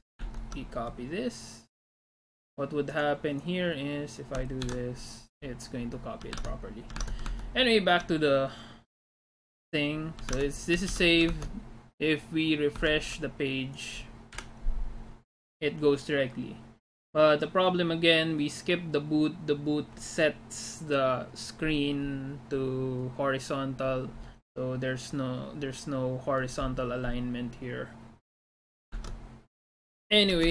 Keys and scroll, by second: 0.2 alt+Tab, 4.7 ctrl+v, 6.4 alt+Tab, 7.0 alt+Tab, 7.4 alt+Tab, 8.1 alt+Tab, 10.4 alt+Tab, 10.9 ctrl+s, 11.4 alt+Tab, 13.4 alt+Tab, 14.4 F5, 29.0 alt+Tab, 30.4 alt+Tab.